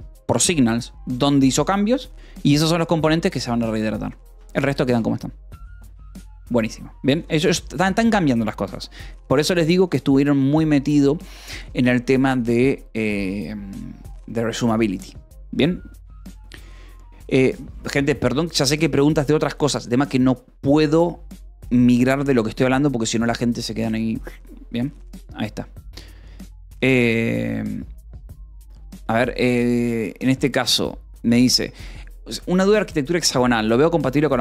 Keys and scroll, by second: 4.7 Escape, 4.8 a, 29.3 Escape, 29.6-31.8 typing.